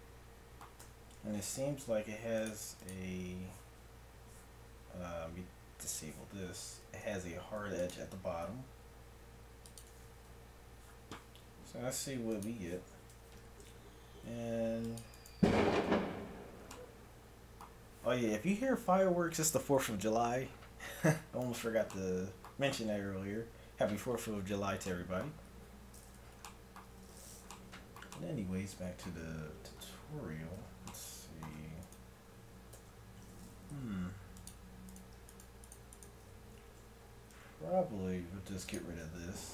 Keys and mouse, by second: 0.9 Tab, 7.6 ctrl+r, 10.3 Tab, 13.2 Tab, 14.3 ctrl+r, 15.9 Tab, 25.4 Tab, 29.1 Tab, 29.8 middle click, 30.6 Tab, 32.8 ctrl+Tab, 37.3 x, 39.1 ctrl+Tab.